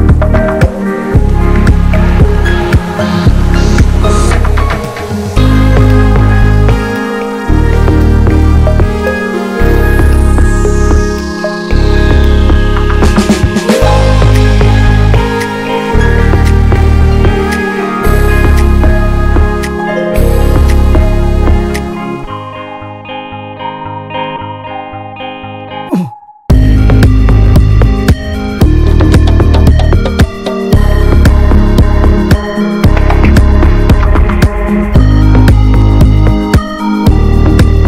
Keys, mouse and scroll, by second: 4.4 middle click, 5.0-5.5 scroll up 3, 5.5 shift+middle click, 5.8-6.2 scroll down 2, 6.2 middle click, 6.9-9.9 drag, 9.9-11.0 right drag, 11.0-13.6 drag, 14.6 scroll down 2, 14.8 middle click, 15.6-16.1 scroll up 2, 15.8 shift+middle click, 16.1 middle click, 17.0-18.7 drag, 18.7 scroll down 3, 18.9-20.4 middle drag, 20.4 scroll up 2, 21.3-24.1 drag, 25.1 scroll down 1, 25.3-28.9 middle drag, 28.9 click, 29.1-29.5 scroll up 2, 29.5-30.6 middle drag, 30.6 scroll up 1, 30.8-31.9 shift+middle drag, 31.9-34.3 drag, 34.3 right click, 35.2-36.2 drag, 36.2 ctrl+z, 37.2 f.